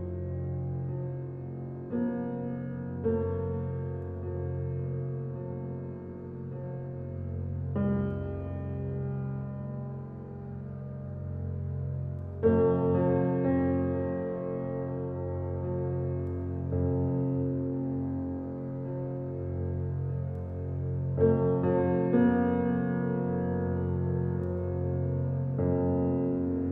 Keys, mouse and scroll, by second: 1.2 alt+click, 11.2 alt+click, 13.8 alt+click, 14.5 alt+right click, 14.8 alt+click, 15.3 alt+right click, 17.4 click, 21.3 r, 22.5-26.5 drag, 26.5-26.7 alt+drag.